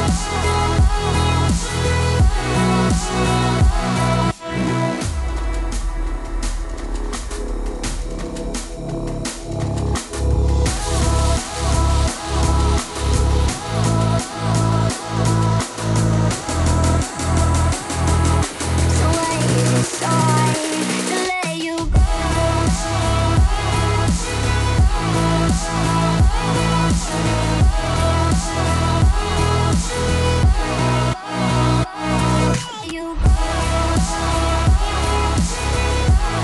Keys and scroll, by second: 2.0 ctrl+d.